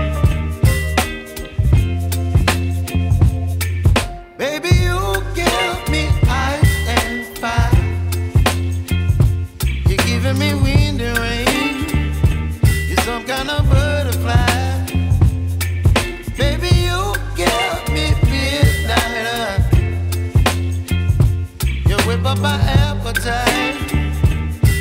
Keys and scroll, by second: 11.6 ctrl+t, 19.4 Return, 22.5 ctrl+z.